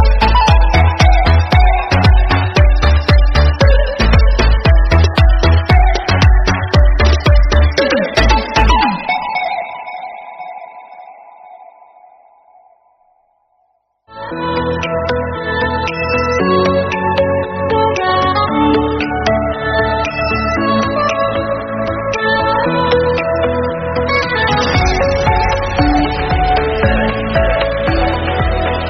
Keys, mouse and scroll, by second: 1.0-2.1 drag, 2.1-2.6 scroll down 3, 2.6 Tab, 3.6 KP_3, 4.1-4.6 shift+middle drag, 4.6 shift+z, 5.2 shift+d, 8.8 g, 9.5 r, 10.0 g, 12.1 KP_7, 12.2 scroll down 2, 12.5 shift+middle click, 12.7 scroll up 3, 12.9 KP_0, 13.6 KP_7, 14.3 shift+d, 16.5 g, 18.3 click, 18.6 click, 18.8 click, 19.5 r, 20.6 click, 20.8 Right, 21.0 KP_0, 21.5 shift+z, 21.9-22.7 scroll up 2, 22.7 click, 24.1 drag, 25.2 click, 26.0 click, 26.1 click, 26.4-27.3 drag, 27.3 scroll up 1, 27.5 click, 28.6 click.